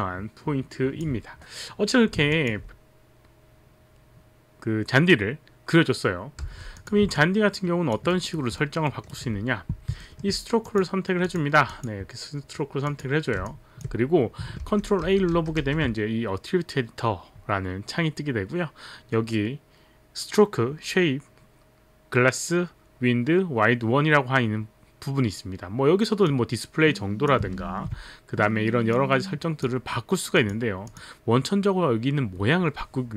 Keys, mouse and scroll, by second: 2.4 alt+click, 6.4 w, 6.8 click, 7.6 alt+click, 8.3 alt+right click, 8.5 alt+middle click, 8.9 alt+right click, 10.1 alt+middle click, 10.7 click, 10.7 alt+middle click, 11.3 click, 11.7 click, 12.9 click, 14.7 ctrl+a, 15.0 ctrl+a, 15.4 ctrl+a, 15.7 ctrl+a, 26.2 click, 27.6 ctrl+z, 29.0 click, 30.4 click, 30.8 click.